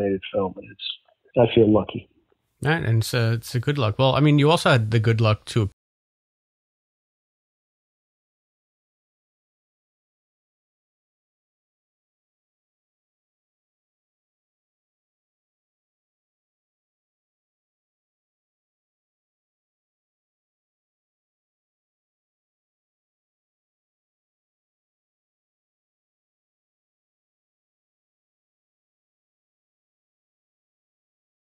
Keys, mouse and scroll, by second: 5.6 space, 9.7-17.0 drag, 18.8 click, 19.9 click, 21.3 click, 22.8 click, 26.4 click, 27.8 click, 29.5 click, 30.6 click.